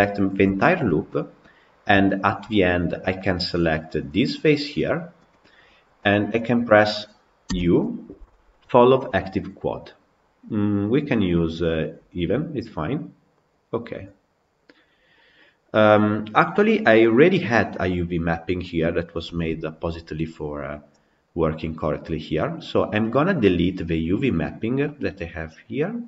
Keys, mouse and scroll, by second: 0.1 alt+click, 1.1 shift+click, 1.6 shift+click, 20.9-21.9 scroll down 4, 21.9-22.8 scroll up 4.